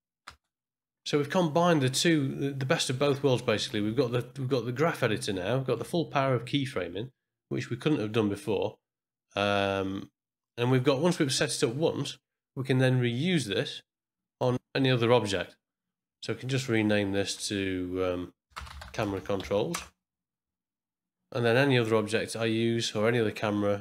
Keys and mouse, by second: 0.4 space, 4.0-5.7 ctrl+drag, 10.4 middle click, 13.8 click, 16.7-20.9 drag, 18.5 BackSpace.